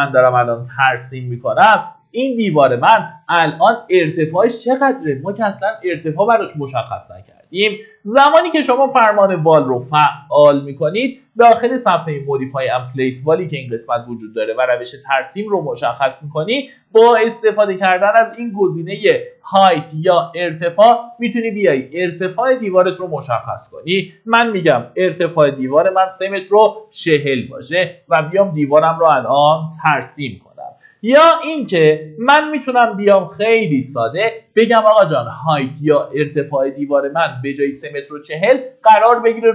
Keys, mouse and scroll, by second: 0.5 click, 2.5-3.0 scroll up 1, 3.4 Escape, 21.6 click, 24.8 KP_3, 25.2 KP_4, 27.7 click, 30.5 middle click, 31.3 Escape, 37.7-39.5 drag.